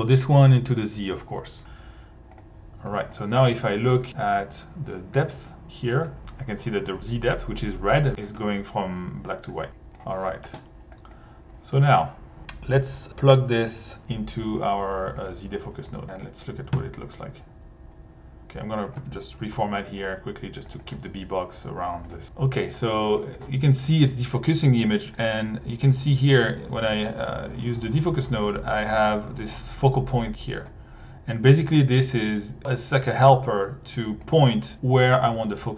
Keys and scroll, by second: 1.5 1, 2.9 1, 16.7 1, 19.0 Tab, 19.1-20.0 typing, 22.2 1.